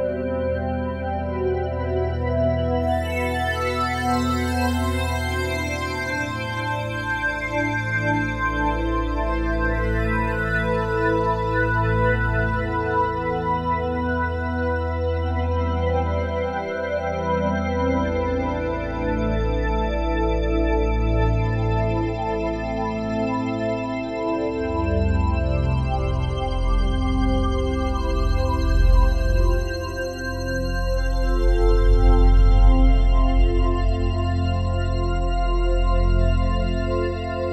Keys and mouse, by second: 0.0 click, 1.3 click, 2.4 r, 2.7 y, 5.2 Escape, 7.1-9.1 drag, 9.1 r, 9.5 y, 10.6-12.0 drag, 12.0 ctrl+s, 14.8-16.4 alt+shift+drag, 16.6 click, 17.0-17.9 typing, 18.6 Escape, 19.6 click, 20.3-21.0 typing, 22.3 click, 22.7-23.8 typing, 25.5-26.4 drag, 26.7-28.1 typing, 28.6-31.5 alt+shift+drag, 30.2-30.9 typing, 31.8 alt+click, 32.4 typing, 32.6 ctrl+alt+click, 32.9 alt+shift+click, 33.6 ctrl+alt+click, 34.2-37.5 alt+drag.